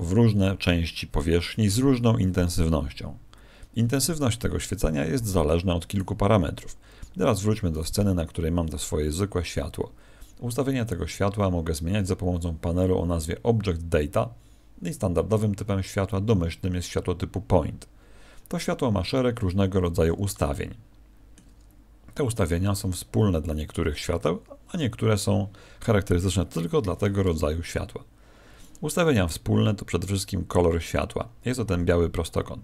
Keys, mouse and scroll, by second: 5.9 right click, 6.6 1, 7.7 right click, 20.5 ctrl+middle click, 21.6-22.4 scroll down 3.